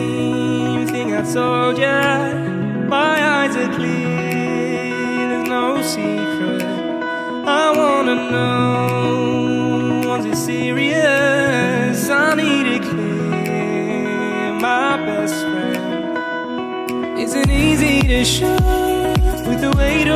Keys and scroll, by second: 9.9 ctrl+u.